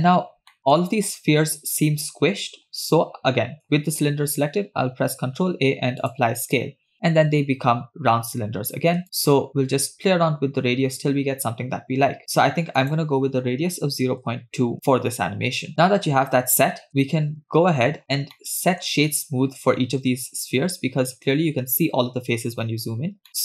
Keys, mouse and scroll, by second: 0.5 shift+middle click, 2.4 scroll down 3, 5.2 ctrl+a, 8.2-8.5 scroll up 2, 9.0-12.5 shift+drag, 12.8-14.7 drag, 15.5 scroll down 1, 16.3-16.9 scroll up 1, 16.9 middle click, 17.6-18.2 scroll up 5, 18.5-18.9 shift+middle drag, 21.5-22.4 scroll up 1, 22.4 scroll up 1, 22.6 scroll down 3, 23.3-23.4 middle drag.